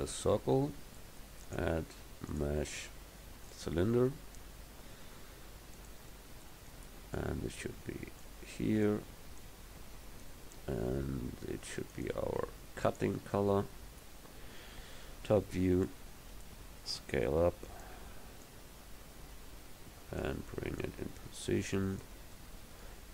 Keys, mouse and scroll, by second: 4.6 s, 14.4 middle click, 15.1 KP_7, 17.0 s, 18.5 click, 20.9-22.3 drag.